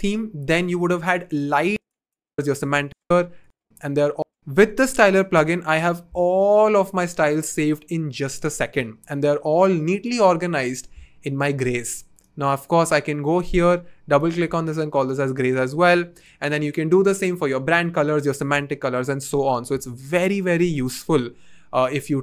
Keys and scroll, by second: 2.3 s, 4.3 r, 4.6 BackSpace, 14.4 s.